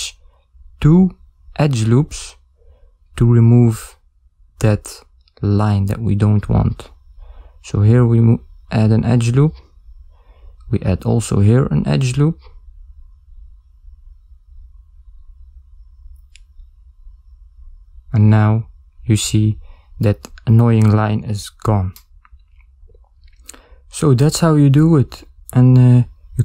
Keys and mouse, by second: 19.9 ctrl+alt+Tab, 19.9 ctrl+middle click, 20.9 ctrl+middle click, 21.4 middle click.